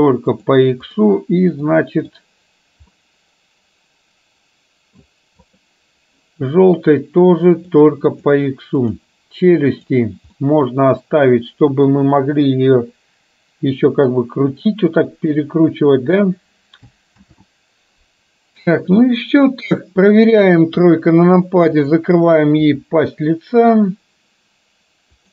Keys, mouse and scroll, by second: 1.7 middle click, 3.0-4.5 middle drag, 4.7 middle click, 5.6 click, 10.0 click, 10.5-12.0 middle drag, 12.8 r, 17.3 ctrl+z, 20.5 KP_3, 21.8 click, 22.7 r.